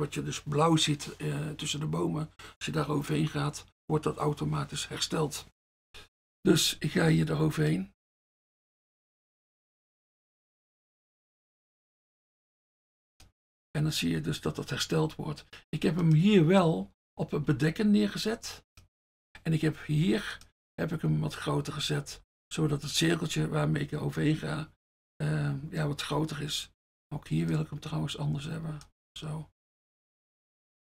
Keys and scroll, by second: 17.5 F1, 20.1 F1, 22.2 F1, 27.2 F1, 30.0 F1.